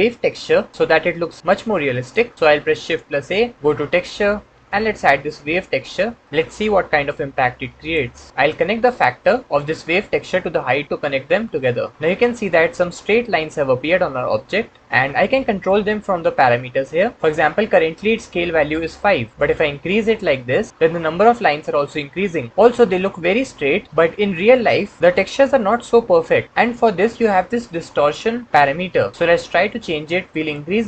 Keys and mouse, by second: 0.9-2.0 drag, 2.8 shift+a, 9.5-10.8 drag, 19.3-22.5 drag, 30.4-30.8 drag.